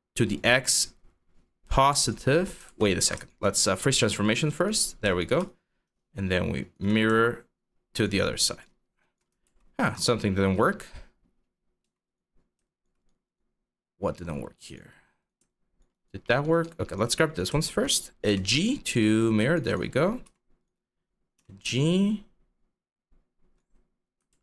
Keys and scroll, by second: 2.3 ctrl+z, 9.1 ctrl+z, 11.4 q, 17.9 g, 19.9 q, 21.0 g, 23.9 ctrl+z.